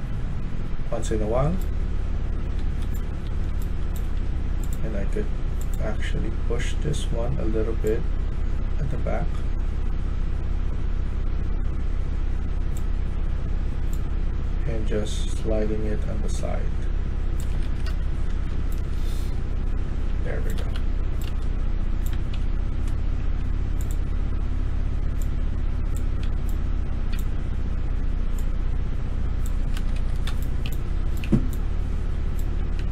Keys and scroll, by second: 1.5-5.3 typing, 17.5 Escape, 17.8 Escape, 18.0-23.1 typing, 26.1-26.9 a, 29.6 Escape, 29.9 Escape, 30.1-32.9 typing.